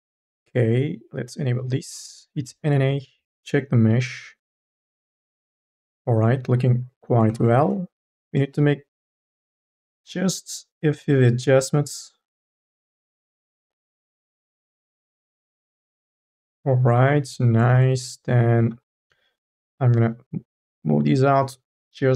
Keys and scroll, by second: 2.2 n, 7.5 ctrl+z, 8.4 e, 9.2 1, 9.9 m, 10.2 o, 14.2 e, 18.0 ctrl+z, 18.5 2, 21.0 1.